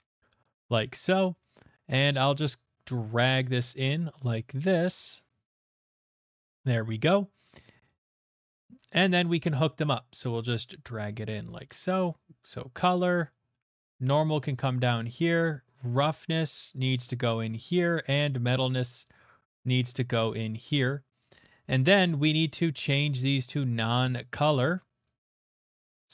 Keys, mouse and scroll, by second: 0.6 click, 1.4 click, 3.2 click, 4.7 click, 8.1-8.7 scroll, 9.7 middle click, 9.7 scroll, 11.4 click, 12.4 click, 13.3 middle click, 14.1 click, 15.2 click, 15.8 click, 17.4 click, 21.2 middle click, 21.7 middle click, 22.6 click, 23.4 click, 24.9 click, 25.0 click, 25.9 middle click.